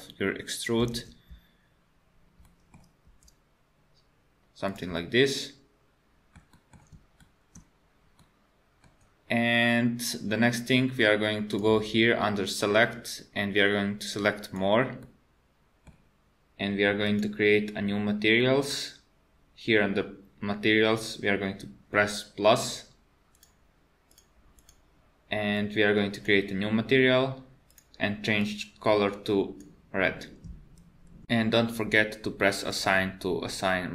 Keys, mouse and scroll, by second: 1.0 super+z, 2.5 middle click, 3.1 e, 5.0 middle click, 6.5 middle click, 7.2 shift+middle click, 7.7 scroll down 2, 8.2 middle click, 11.5 click, 15.0 middle click, 17.0 click, 22.6 click, 23.3 click, 24.1 click, 24.6 click, 25.6 click, 27.7 click, 32.7 click.